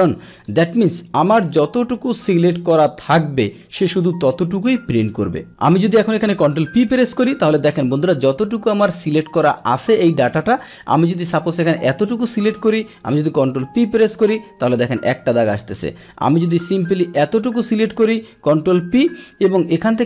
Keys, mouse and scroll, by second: 0.4 click, 1.8 Escape, 6.5 ctrl+p, 9.7 Escape, 10.6 click, 11.2 click, 13.2 ctrl+p, 15.2 Escape, 15.3 Escape, 15.7 click, 16.4-17.7 drag, 18.4 ctrl+p.